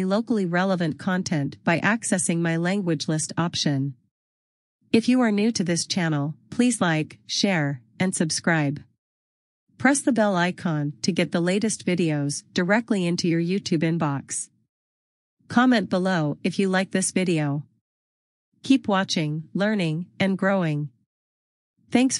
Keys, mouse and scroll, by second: 5.4 click, 7.8 click, 9.8 click, 14.1 click.